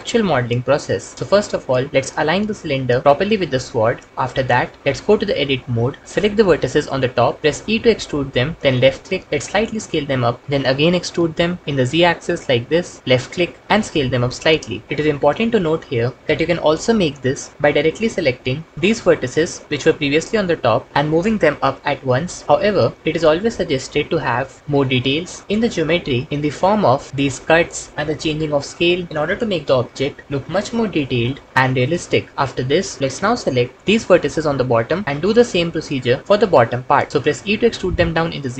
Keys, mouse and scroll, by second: 2.2 s, 3.1 g, 5.5 alt+z, 7.5 e, 9.4 s, 10.8 e, 13.6 s, 18.7 click, 36.2 shift+middle click, 37.2 e.